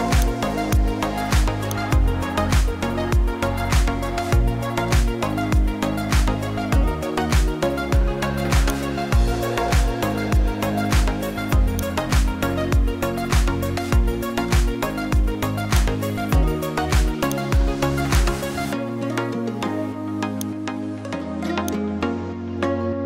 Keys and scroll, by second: 4.3 ctrl+g, 16.3 ctrl+t.